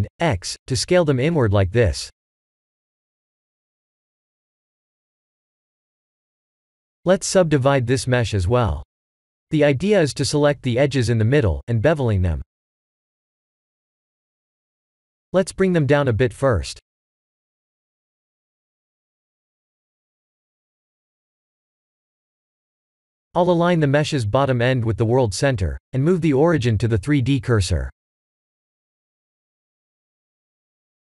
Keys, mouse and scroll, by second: 0.0 ctrl+r, 1.2 click, 2.3 shift+click, 3.1 s, 7.1 Tab, 7.5 ctrl+3, 7.9-9.1 middle drag, 9.2 Tab, 9.7 middle click, 11.4 click, 12.0 g, 16.3 Tab, 16.7-17.7 middle drag, 17.8-20.3 middle drag, 21.5 KP_7, 23.7 g, 27.1-28.6 middle drag, 29.6-31.0 drag.